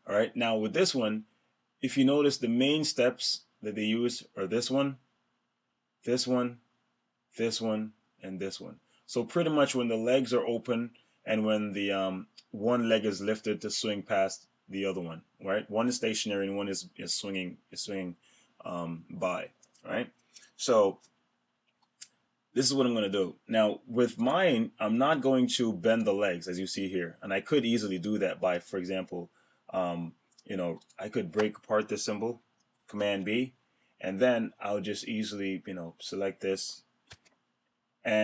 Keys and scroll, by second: 32.8 super+b.